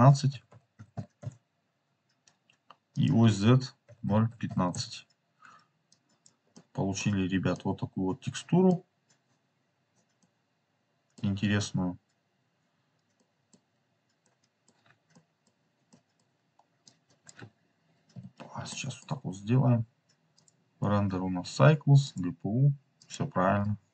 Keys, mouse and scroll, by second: 2.8 click, 4.3-5.4 drag, 6.2 click, 6.5 middle click, 7.5-8.6 middle drag, 10.2 middle click, 11.5 scroll up 2, 12.7-13.1 scroll down 3, 13.1 middle click, 13.8-14.1 scroll down 3, 14.1 middle click, 15.0 middle click, 15.8 middle click, 16.8 click, 18.1 Delete, 18.6 middle click, 20.3 click, 22.0 click, 23.0 click.